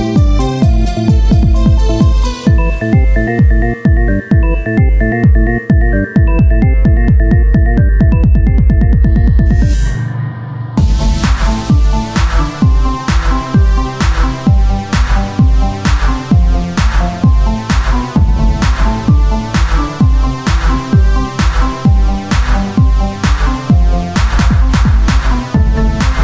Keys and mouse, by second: 2.4 KP_1, 3.6 z, 4.7-8.3 z, 14.0 z, 15.4 click, 16.0 Tab, 18.6 s, 20.2-22.8 drag, 22.8-24.4 right drag, 24.4 click, 24.8 right click, 25.1-26.2 right drag.